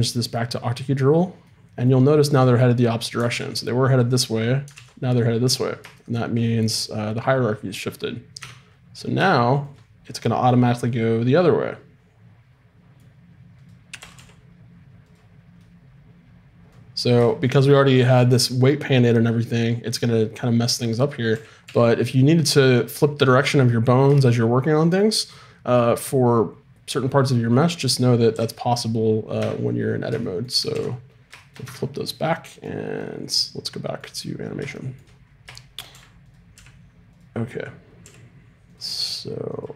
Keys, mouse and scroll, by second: 3.3 alt+f, 4.7 alt+f, 8.4 Tab, 13.6-15.6 right drag, 14.0 r, 21.3 a, 21.6 a, 28.3 w, 29.4 Tab, 30.7 alt+f, 31.6 Tab, 35.9 a, 36.2 right click, 36.5 g, 38.0 g.